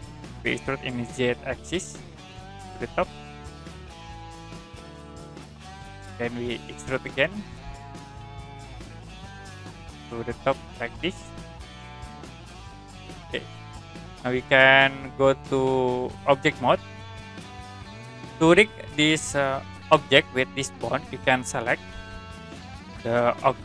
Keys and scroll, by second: 1.3 z, 9.7 e, 11.6 z.